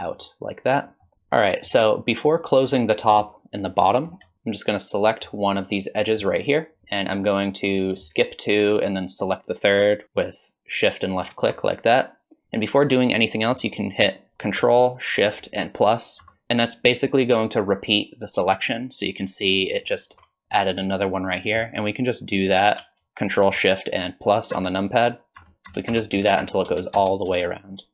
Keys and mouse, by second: 1.0 click, 1.4 click, 2.8 click, 3.9 click, 5.1 click, 6.0 click, 16.2 ctrl+shift+KP_Add, 24.6 ctrl+shift+KP_Add, 25.4 ctrl+shift+KP_Add, 25.7 ctrl+shift+KP_Add, 25.9 ctrl+shift+KP_Add, 26.2 ctrl+shift+KP_Add, 26.4 ctrl+shift+KP_Add, 26.7 ctrl+shift+KP_Add, 27.0 ctrl+shift+KP_Add, 27.3 ctrl+shift+KP_Add.